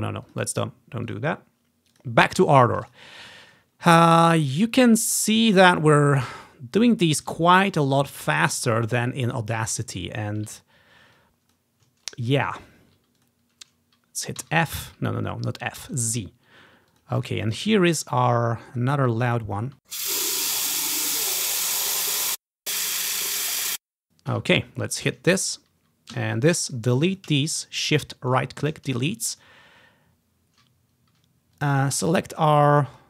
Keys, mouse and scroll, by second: 0.4 click, 1.2 click, 2.1 click, 3.0 click, 3.4-4.6 scroll down 1, 4.0 ctrl+click, 5.5-7.1 scroll down 1, 7.1 scroll up 1, 7.6 scroll down 1, 8.2 scroll up 2, 8.6 click, 9.0 scroll down 1, 9.1-10.9 drag, 9.9 scroll up 2, 10.3 scroll down 1, 11.0 scroll up 1, 11.3 click, 12.1-12.5 ctrl+scroll up 3, 12.5 ctrl+click, 12.5 ctrl+scroll down 1, 12.7 ctrl+scroll up 1, 12.7 ctrl+scroll down 1, 12.8 ctrl+scroll up 1, 12.8 ctrl+scroll down 1, 12.9 ctrl+scroll up 1, 12.9-13.3 ctrl+scroll down 1, 13.3 click, 14.6 typing, 15.9 typing, 17.1-20.9 drag, 19.8 typing, 20.6-21.8 ctrl+scroll up 1, 21.8-22.5 ctrl+scroll down 1, 22.2-24.5 typing, 22.5 click, 24.0 click, 25.2 click, 26.3-26.9 typing, 26.5 click, 26.8 shift+middle click, 27.3 click, 28.5 shift+click, 28.8-29.6 typing, 29.1 click, 29.5 click, 31.7-33.0 drag, 32.1 s.